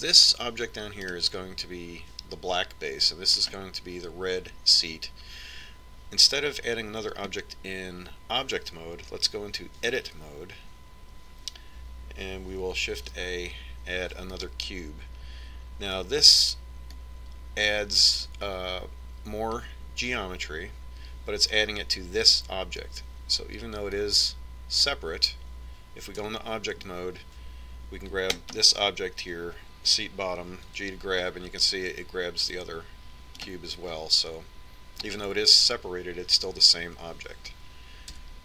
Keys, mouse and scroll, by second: 2.1-7.8 right drag, 10.9 Tab, 13.9 shift+a, 18.1-20.0 drag, 25.1-27.1 drag, 27.4 Tab, 29.5-31.4 right drag, 31.9 g.